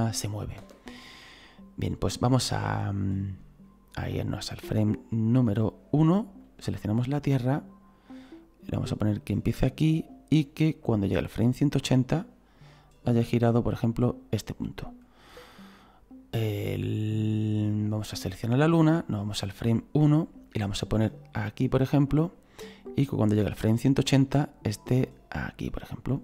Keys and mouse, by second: 0.6 space, 6.4 right click, 8.4 click, 10.8 click, 13.5 click, 16.6 click, 18.0 right click, 19.1 click, 21.2 click, 22.9 click, 25.0 click.